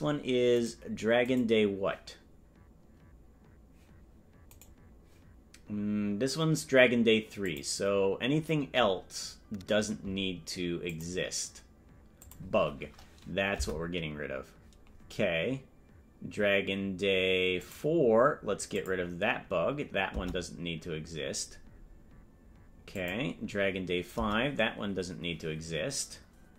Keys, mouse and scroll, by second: 0.7 right click, 1.8 right click, 7.4 click, 7.4 right click, 10.8 click, 12.2 click, 14.1 Delete, 17.6 click, 18.7 click, 20.7 Delete, 22.9 click, 24.7 Delete.